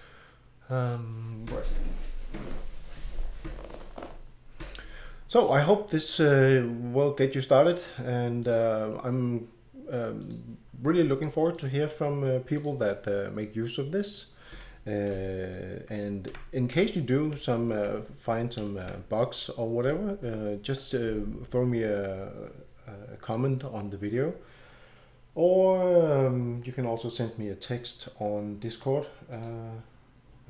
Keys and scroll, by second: 16.3-20.4 typing.